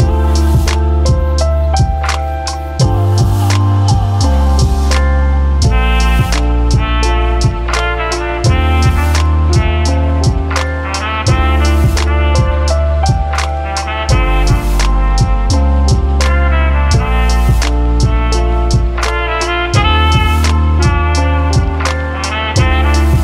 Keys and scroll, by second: 2.6 ctrl+z, 3.8 ctrl+z, 8.0 ctrl+d, 9.8 ctrl+z, 12.4 ctrl+1, 13.1 typing, 14.2 ctrl+1, 18.5 v, 18.7 v, 18.9 ctrl+1, 20.9-23.2 typing.